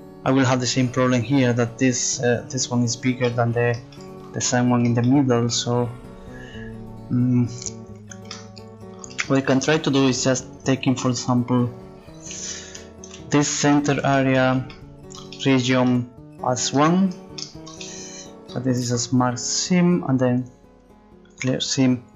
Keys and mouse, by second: 11.1 right click, 13.5-14.8 middle drag, 19.7 click.